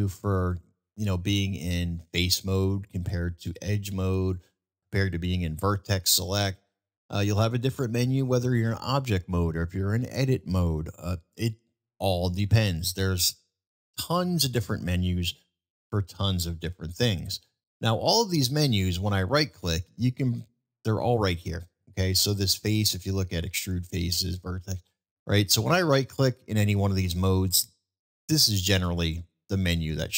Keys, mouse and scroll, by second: 0.0 click, 4.2 click, 7.1 middle click, 10.7-11.0 middle drag, 11.7-12.2 middle drag, 13.3 middle click, 14.6-15.3 middle drag, 19.9-26.8 drag, 28.0-28.5 drag, 29.0-30.1 drag.